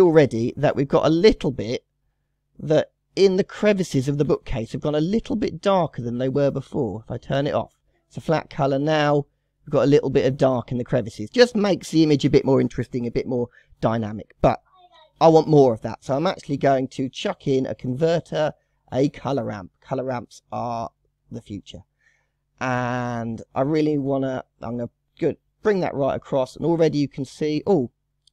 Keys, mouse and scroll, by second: 0.0 KP_0, 0.4 scroll up 3, 0.8-1.1 middle drag, 1.1-1.6 scroll up 5, 1.6-6.0 middle drag, 6.0 click, 8.6 click, 15.2 shift+a, 15.9-16.6 drag, 21.5-22.8 scroll up 11, 23.1-24.6 middle drag, 24.6-27.6 drag.